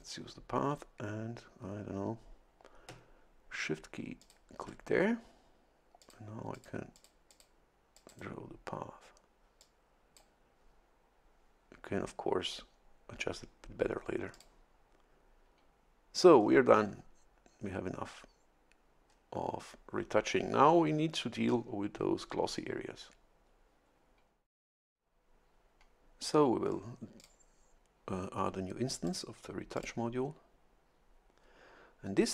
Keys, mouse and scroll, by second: 4.2 shift+click, 6.0 click, 6.5 click, 6.9 click, 7.9 click, 8.1 right click, 9.6 click, 14.3 click, 16.4-17.0 scroll down 3, 19.1 scroll up 1, 27.2 click, 29.1 click, 29.8 click.